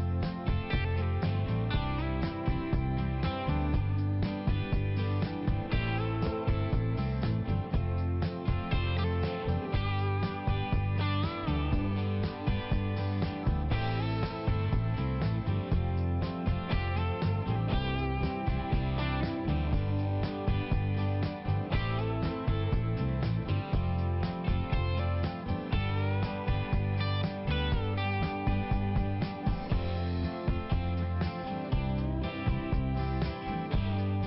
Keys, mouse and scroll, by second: 0.5 click, 0.8 click, 2.0-2.7 typing, 2.1 click, 2.7 click, 3.3 click, 3.5 click, 3.8 click, 3.9 double click, 4.1 double click, 4.4 double click, 4.6 double click, 4.8 double click, 5.1 double click, 5.2 double click, 5.5 double click, 5.7 double click, 5.8 double click, 7.1 click, 8.3 click, 9.7 click, 9.8 click, 10.0 click, 10.1 double click, 10.4 double click, 10.7 double click, 10.9 double click, 11.1 double click, 11.4 double click, 11.5 double click, 11.8 double click, 12.1 double click, 12.9 double click, 13.1 double click, 13.2 double click, 13.5 double click, 13.7 double click, 14.2 double click, 14.6 double click, 14.7 double click, 14.9 double click, 15.0 double click, 15.4 double click, 15.8 click, 16.1 click, 16.1 double click, 16.6-17.5 typing, 17.5 click, 17.8 click, 18.0 double click, 18.1 double click, 18.6 double click, 18.8 double click, 19.0 double click, 19.5 double click, 19.9 click, 20.3 click, 20.4 double click, 20.9 double click, 21.3 click, 21.5 click, 21.7 click, 21.8 double click, 22.1 double click, 22.5 double click, 22.6 double click, 23.1 double click, 23.5 double click, 24.9 click, 25.0 click, 25.3 click, 25.4 double click, 25.8 double click, 25.9 double click, 26.4 double click, 26.8 click, 27.3 click, 27.7 click, 28.1 click, 28.1 double click, 30.4 click, 31.0 click, 31.6 click, 31.7 click, 32.0 click, 32.2 double click, 32.4 double click, 32.8 double click, 32.9 double click, 33.1 double click, 33.5 double click, 33.7 double click, 34.0 double click.